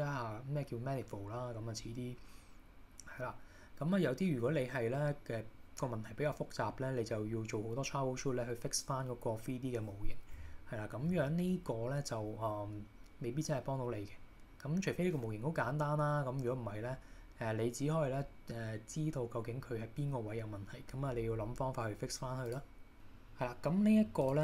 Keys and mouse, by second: 22.5 click.